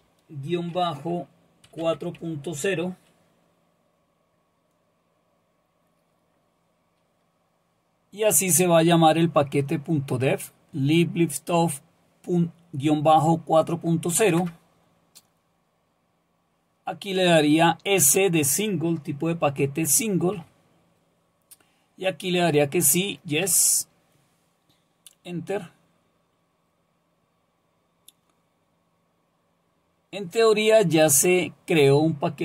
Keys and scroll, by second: 0.5-2.7 typing, 14.4 Return, 20.3 typing, 23.5 Return.